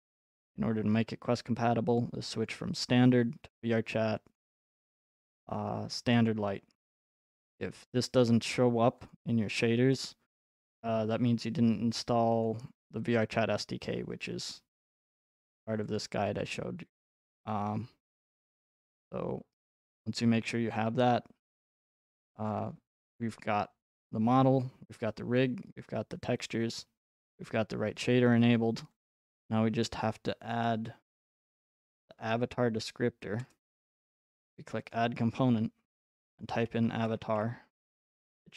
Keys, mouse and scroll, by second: 3.6 click, 4.4 click, 6.3 click, 9.1 click, 11.4 click, 12.5 click, 16.0 click, 18.4 click, 23.3 click, 29.0 click, 31.4 click, 33.4 BackSpace, 34.6 click, 34.9 click, 36.1-37.8 typing.